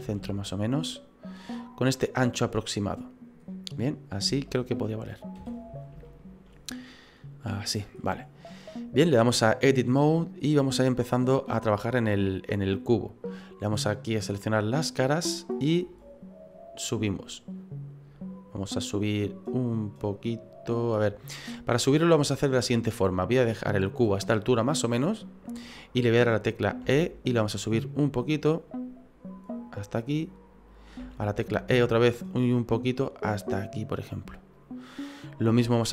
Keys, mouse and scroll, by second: 0.0 s, 1.6 middle click, 3.4-3.8 scroll up 5, 3.8 middle click, 4.4 shift+middle click, 5.4 KP_1, 6.0 shift+middle click, 8.0 middle click, 9.6 click, 12.7 right click, 14.3 click, 16.0 right click, 17.2 click, 24.3 middle click, 26.8 e, 31.0 e, 35.0 middle click.